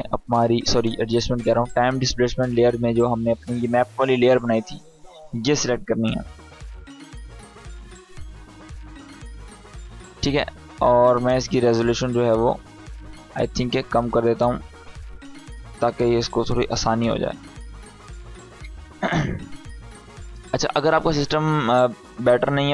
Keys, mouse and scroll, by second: 0.7 click, 3.3 click, 12.8 click.